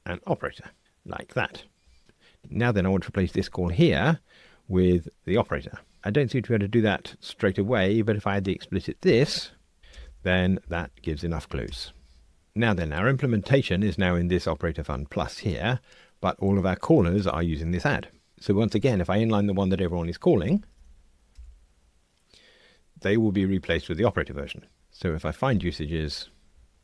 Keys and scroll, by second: 9.9 alt+Return, 21.9 alt+super+n, 25.5 ctrl+alt+h.